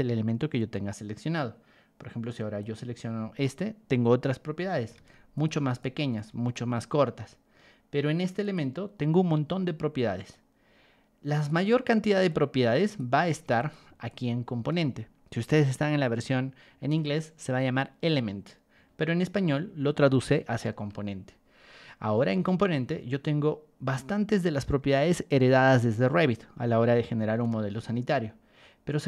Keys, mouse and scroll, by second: 2.6 click, 4.9 ctrl+1, 5.3 click, 5.8 ctrl+click, 7.0 Escape, 8.4 click, 10.3 click, 12.2 click, 13.2 ctrl+1, 13.5 click, 14.0 ctrl+click, 20.7 Escape, 23.8 middle click, 27.6 ctrl+1.